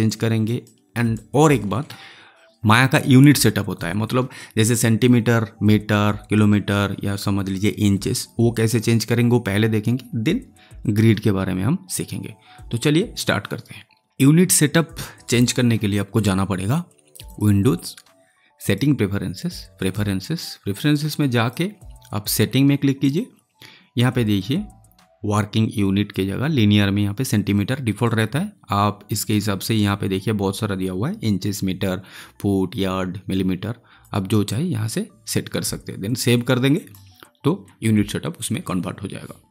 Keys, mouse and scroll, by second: 0.0 alt+click, 0.6-2.5 alt+right drag, 28.0 click, 33.9 click, 36.7 click.